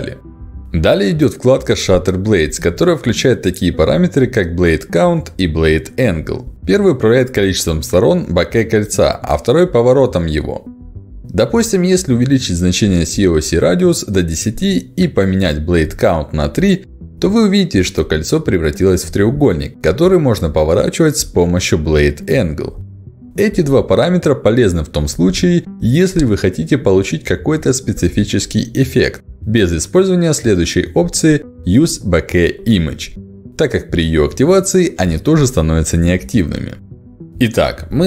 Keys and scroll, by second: 11.8 1, 11.9 0, 12.1 Return, 18.0 3, 18.3 Return.